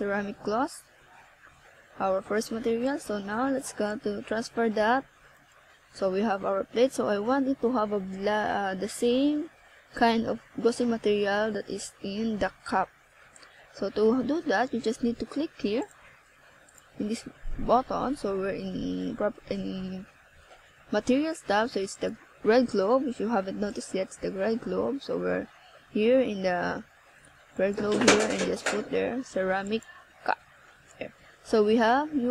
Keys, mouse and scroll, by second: 0.5 click, 2.4 click, 2.8 click, 6.9 click, 7.8 click, 8.6-8.9 scroll down 1, 9.1 middle click, 10.9 right click, 16.9 click, 18.6 KP_7, 19.9 right click, 20.8 click, 21.8 right click, 25.1 shift+d, 28.0 click, 29.3 KP_1, 30.7 scroll up 1, 31.6 scroll up 1, 32.2 z.